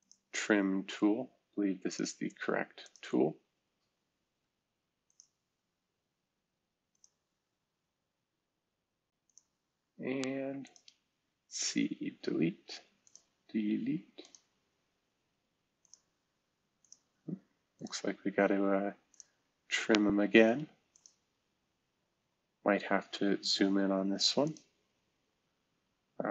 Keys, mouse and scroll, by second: 0.0-0.4 drag, 1.9 click, 2.2 click, 2.8 click, 4.3 Delete, 5.0-6.1 drag, 6.9 click, 9.7 Escape, 11.8 Delete, 13.6 Delete, 20.9 click, 25.8 Escape.